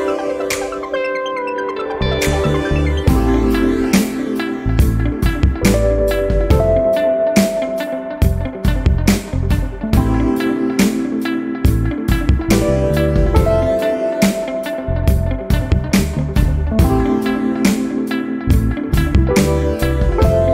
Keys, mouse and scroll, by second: 1.6 click, 4.3 click, 7.2 click, 8.1-8.6 scroll down 1, 8.9-9.3 scroll up 2, 11.4 click, 13.0 click, 15.2 click, 17.3 click, 19.5 click.